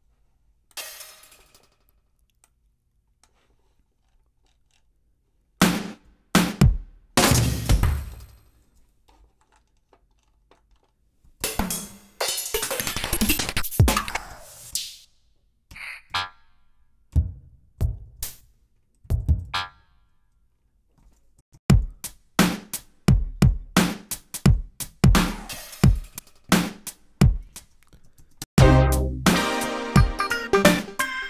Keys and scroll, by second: 11.3 alt+Up, 14.2 alt+Up, 19.0 alt+Down, 21.3 alt+Home, 27.2-28.6 typing.